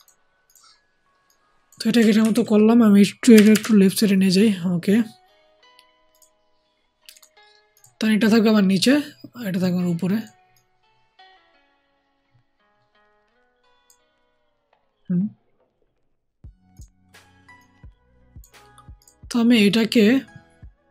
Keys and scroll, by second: 2.1 ctrl+t, 3.3 Left, 3.4 Left.